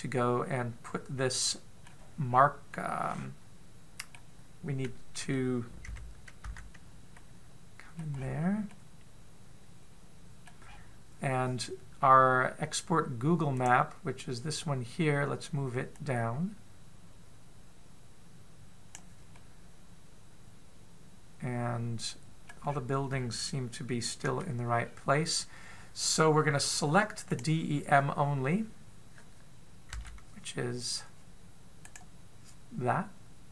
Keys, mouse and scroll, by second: 3.1-3.5 scroll down 2, 3.5 middle click, 7.2 z, 8.0 middle click, 9.0-9.5 scroll up 2, 9.5 middle click, 9.5 scroll up 3, 11.5-12.2 scroll down 7, 14.4 click, 16.8 click, 20.2 middle click, 23.4-25.0 scroll up 7, 25.0 KP_7, 25.6-26.7 scroll down 3, 26.7-27.2 scroll down 1, 28.1 click, 30.8 a, 32.7 right click.